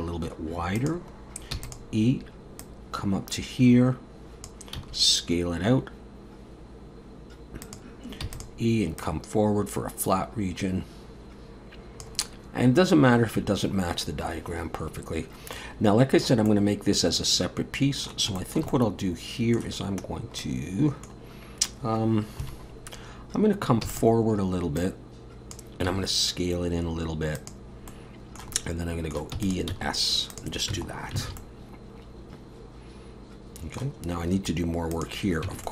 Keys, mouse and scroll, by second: 1.5 e, 2.6 click, 4.8 s, 8.2 e, 9.0 click, 15.5 middle click, 16.5 middle click, 18.4 shift+middle click, 18.6 shift+middle click, 18.7 middle click, 20.4 middle click, 20.6 shift+middle click, 22.4 KP_7, 23.2-23.6 scroll up 1, 23.8 e, 24.8 click, 25.9 s, 27.9 middle click, 28.5 middle click, 29.3 e, 29.7 s, 30.7 Tab, 30.9 scroll down 3, 31.2 alt+a, 31.4 middle click, 34.0 scroll up 2, 34.9 click, 35.5 Tab, 35.6 middle click.